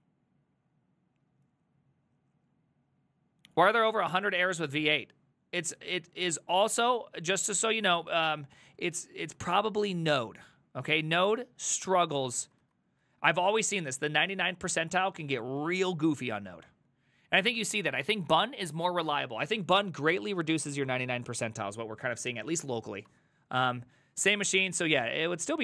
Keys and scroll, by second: 4.6 alt+{, 8.1 ctrl+u, 8.5 ctrl+u, 9.3 ctrl+u, 9.5 ctrl+u, 9.9 ctrl+u, 11.3 ctrl+d, 12.5 ctrl+u, 13.1 ctrl+u, 14.7 ctrl+d, 15.0 ctrl+d, 15.1 ctrl+d, 15.2 ctrl+d, 15.4 ctrl+d, 15.5 ctrl+d, 15.8 a.